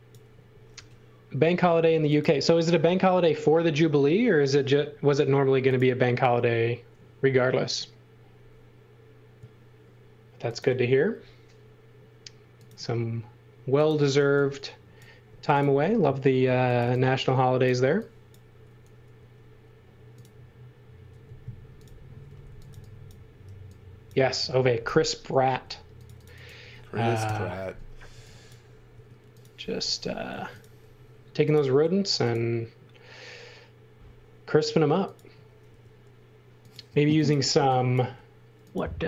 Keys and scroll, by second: 0.0-0.7 typing, 14.2 e, 15.3 space, 16.4 x, 16.8 v, 17.8 x, 19.1 f, 21.1-23.4 typing, 25.5 space, 27.2 Delete, 28.1 x, 28.9 space, 30.0 m, 31.7 s, 35.7 m, 37.6 e, 38.1 space.